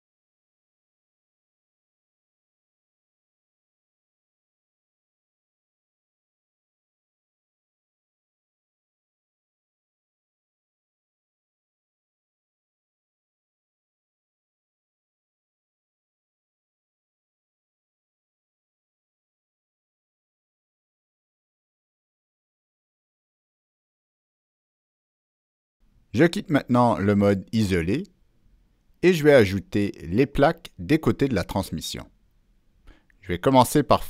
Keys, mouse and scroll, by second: 0.3 click, 1.1 click, 1.9 click, 3.2 click, 3.6 middle click, 5.4 click, 5.4 middle click, 6.0 click, 6.1 middle click, 7.0 click, 8.9 click, 9.3 click, 11.3 click, 12.1 click, 13.0-13.3 drag, 13.3 middle click, 13.7 middle click, 14.3 click, 14.9 click, 15.2-15.6 scroll up 1, 15.7-16.1 scroll down 2, 16.1 middle click, 16.8 click, 17.8 click, 18.0 middle click, 18.4 click, 18.7 scroll down 1, 19.3 click, 19.9 click, 21.1 click, 21.9 click, 22.7 click, 23.8 middle click, 24.0 middle click, 26.0 scroll down 1, 26.1 right click, 26.8 Escape, 27.7 Escape, 27.7 click, 27.7 right click, 28.0 Escape, 28.0 right click, 28.7 scroll up 1, 29.1 scroll down 1, 30.0 ctrl+middle click.